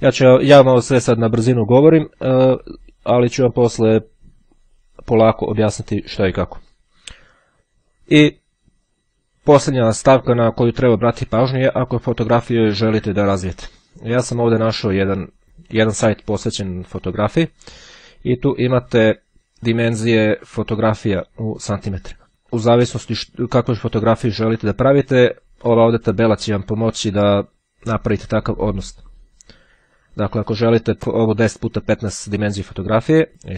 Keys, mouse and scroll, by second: 13.3-14.9 drag, 19.3 click, 22.2 click.